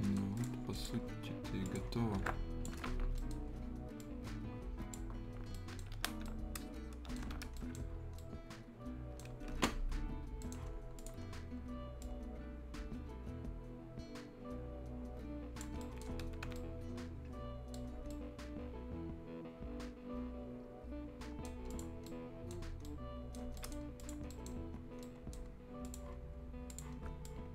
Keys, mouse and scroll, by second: 0.4 click, 0.5 scroll down 1, 0.7 click, 2.8-3.1 shift+scroll up 1, 3.1 shift+right click, 4.0 shift+click, 5.2-5.5 shift+scroll down 1, 5.5 shift+right click, 5.7 shift+Escape, 6.2 shift+right click, 7.1 shift+Escape, 7.2 shift+scroll down 1, 7.3 shift+Escape, 7.4-8.2 shift+scroll up 2, 7.5 shift+right click, 8.2 shift+right click, 9.3 shift+Escape, 10.4 shift+right click, 10.7 shift+scroll up 1, 11.0 shift+click, 11.2 shift+scroll up 1, 12.0-15.8 shift+drag, 15.8 shift+right click, 15.9 shift+Escape, 16.1 shift+scroll down 1, 16.2 shift+Escape, 16.5-17.9 shift+right drag, 17.9 shift+scroll up 1, 18.1-21.7 shift+right drag, 21.7 shift+click, 21.9 shift+scroll up 1, 22.0 shift+right click, 23.4 shift+scroll down 1, 23.5 shift+right click, 24.0 shift+click, 24.3 shift+right click, 25.8 shift+click.